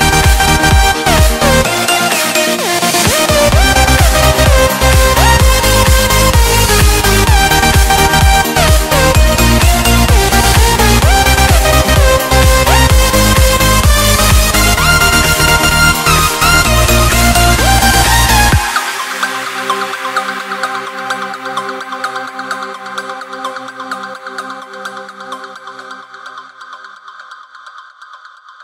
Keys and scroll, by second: 0.5 alt+7, 1.8 alt+a, 6.1 Escape, 6.7 Escape, 14.2 Return, 15.7 Return, 18.2 Return, 25.3 Return.